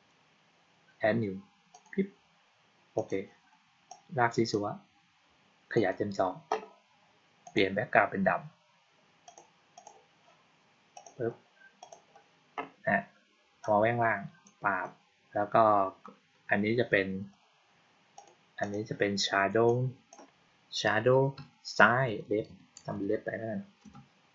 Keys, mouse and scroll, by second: 1.6 click, 2.9 click, 3.8 click, 5.6 click, 7.3 click, 9.1 click, 9.6 click, 10.8 click, 11.7 click, 13.5-14.3 drag, 18.0 click, 18.5 click, 19.6-20.0 drag.